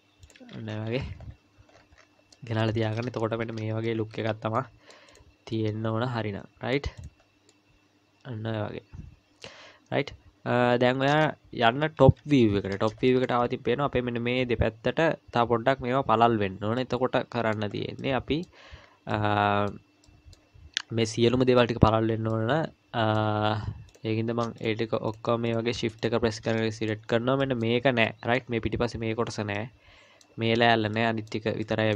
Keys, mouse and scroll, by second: 0.7-1.4 scroll down 12, 1.7-2.3 scroll down 9, 2.3 middle click, 2.8-3.4 scroll down 2, 3.4-4.6 scroll down 3, 3.4 z, 4.1 z, 4.6 middle click, 5.1 click, 5.5 middle click, 7.0 click, 7.5 middle click, 11.7 KP_1, 12.0 KP_7, 12.7 scroll up 4, 13.1 shift+middle click, 13.4-14.2 scroll up 2, 15.4-16.1 scroll down 2, 16.8 middle click, 17.8-18.4 scroll down 2, 18.0 middle click, 18.8 scroll down 1, 19.1 middle click, 20.0 middle click, 22.3 middle click, 23.9 click, 24.6 shift+click, 26.6 middle click, 27.1 scroll down 2, 27.4 middle click, 28.0 middle click, 29.6 middle click, 30.9 middle click, 31.6 middle click.